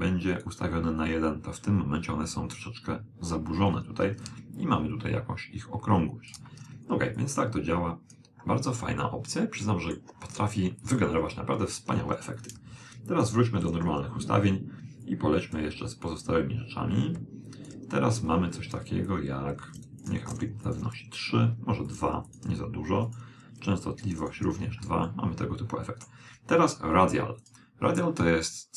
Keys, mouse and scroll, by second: 4.3 click, 7.2 click, 8.9-10.7 middle drag, 12.4 click, 15.1-17.9 drag, 19.1-21.9 drag, 21.9-24.9 drag, 25.1-26.9 middle drag, 27.5 click.